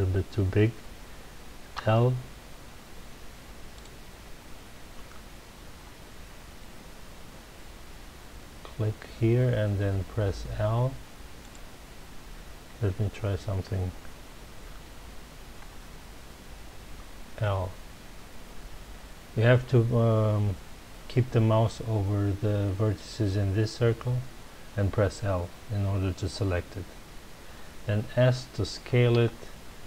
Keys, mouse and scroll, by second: 1.7 l, 3.7 click, 5.8 l, 11.4 click, 15.7 l, 29.1 s.